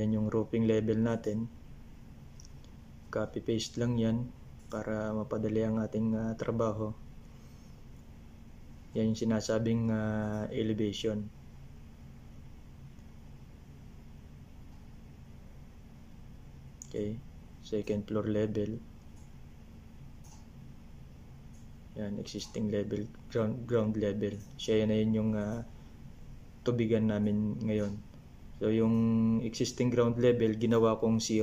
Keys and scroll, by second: 7.1 ctrl+c, 11.8 ctrl+c, 18.0-20.7 typing, 23.0-25.3 typing, 28.8 BackSpace, 29.8 shift+=, 30.4 0.